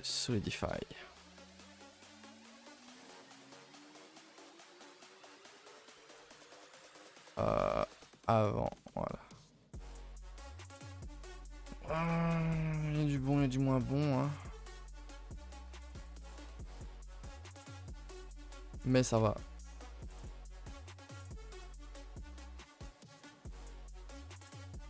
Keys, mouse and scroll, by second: 0.4 middle click, 0.6 scroll up 2, 0.9-1.9 middle drag, 1.9-4.9 drag, 5.4 click, 5.9 middle drag, 6.2 a, 6.4 a, 7.6-8.1 drag, 8.9-9.5 middle drag, 9.5 a, 9.7 a, 9.7-10.9 middle drag, 10.9 a, 11.1 a, 11.2-11.7 middle drag, 11.7 ctrl+s, 11.9-12.4 shift+middle drag, 12.4-13.4 scroll up 2, 13.4 click, 13.8 click, 14.1 click, 14.6 click, 15.1 click, 15.5 click, 15.8 scroll down 2, 15.9 a, 16.1 a, 16.2 middle click, 16.5 ctrl+s, 16.7 KP_0, 17.5 shift+middle click, 17.7-18.6 scroll up 5, 18.6 click, 19.0 a, 19.2 a, 19.9-24.8 drag.